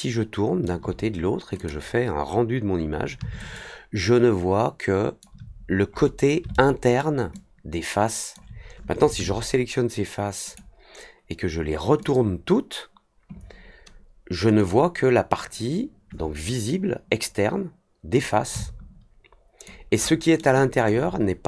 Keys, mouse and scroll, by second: 1.5 click, 3.5-5.1 alt+drag, 5.8 scroll up 1, 6.5-6.9 alt+middle drag, 7.3-8.3 alt+drag, 11.9 click, 14.5 click, 18.5-19.6 alt+drag, 20.0-20.3 alt+middle drag, 20.5 alt+click.